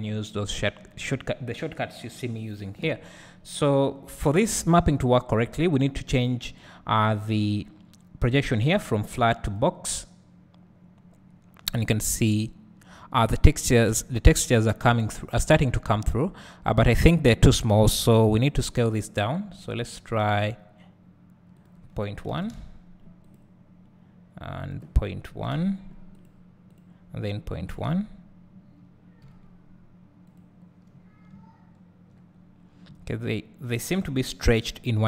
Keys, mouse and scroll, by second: 0.1-7.0 drag, 9.6-19.7 drag, 11.0 scroll up 1, 11.6 `, 23.2 click, 26.1 click, 30.2 click, 30.9 scroll down 2, 32.4 scroll up 1.